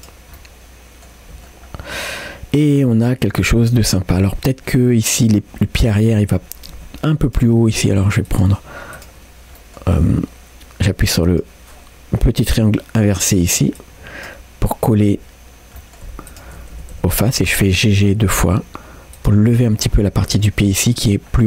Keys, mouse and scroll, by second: 0.0 middle click, 0.4 g, 0.7 middle click, 1.0 Tab, 1.0 scroll down 1, 1.3 middle click, 1.7 scroll up 1, 2.7 middle click, 3.1 scroll up 2, 3.4 Tab, 7.3 click, 8.3-9.6 drag, 9.6 middle click, 11.3 click, 13.8-15.8 drag, 15.8 middle click, 16.3 shift+click, 16.8 g, 19.6 scroll down 1, 19.8 middle click, 21.3-21.4 scroll down 1.